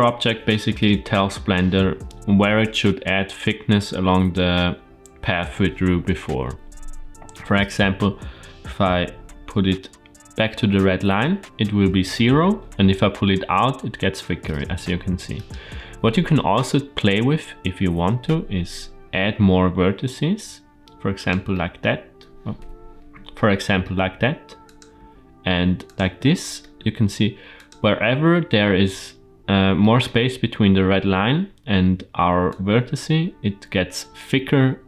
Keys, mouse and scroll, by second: 9.0 g, 18.9 e, 21.4 middle click, 22.4 KP_7, 23.2 shift+middle click, 23.9 e, 24.8 e, 26.0 shift+middle click, 26.7 e, 27.7-29.0 scroll down 2, 29.7 shift+middle click, 32.3 click.